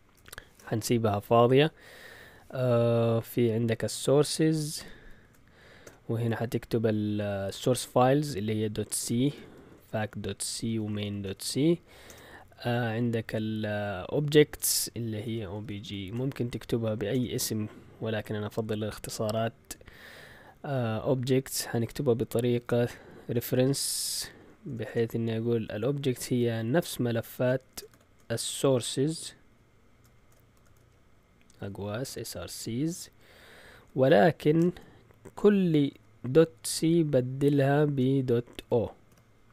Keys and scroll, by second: 0.4 Return, 3.8-5.8 typing, 8.6-12.0 typing, 15.0-17.1 typing, 22.8 shift+9, 24.6 Delete, 24.8 BackSpace, 26.7 shift+s, 27.7 BackSpace, 27.9 shift+4, 29.2-32.9 typing, 34.5 typing, 35.9-36.7 typing, 38.0-39.5 typing.